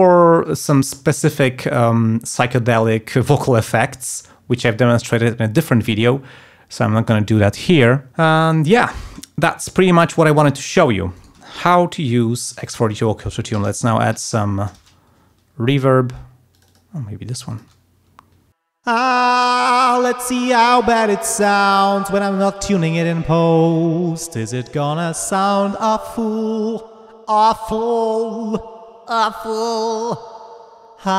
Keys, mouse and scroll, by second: 8.6 click, 9.5 click, 10.0 click, 10.7 click, 11.1 right click, 12.3 click, 13.2-14.6 typing, 16.5 click, 17.5 click, 18.5 ctrl+space, 18.7 ctrl+click, 21.6 ctrl+scroll up 2, 30.0 ctrl+scroll down 2, 30.3 ctrl+scroll up 2.